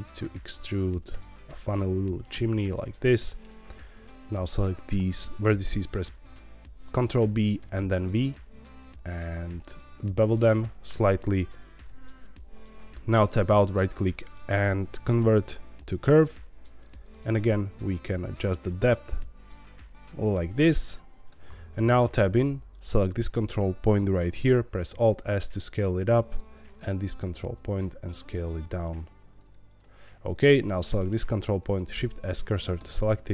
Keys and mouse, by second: 0.0 click, 0.2 e, 0.8 click, 2.2 click, 2.2 e, 2.5 middle click, 4.0 click, 4.5 shift+click, 6.2 ctrl+b, 7.5 v, 11.1 click, 13.1 Tab, 17.0 click, 18.0 shift+click, 18.6-21.3 shift+drag, 22.0 Tab, 22.8-24.8 drag, 24.8 alt+s, 26.3 click, 26.7 click, 27.2 alt+s, 29.6 click, 30.5 click, 30.9 middle click, 31.6 shift+s, 32.8 shift+middle click.